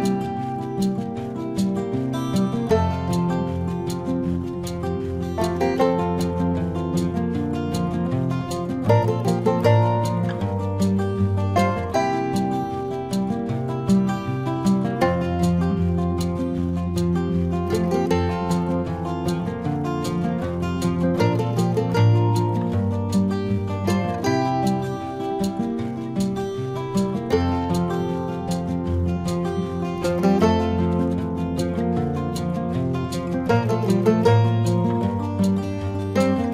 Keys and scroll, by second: 0.1 ctrl+-, 0.3 space, 0.5 ctrl+-, 0.6 space, 0.9 ], 1.3 space, 7.9 ], 9.5 space, 12.7 space, 14.6 ctrl+alt+z, 19.4 space, 20.0 space, 20.5 space, 22.4 space, 23.2 space, 23.9 ctrl+=, 24.9 space, 26.0 space, 32.7 space.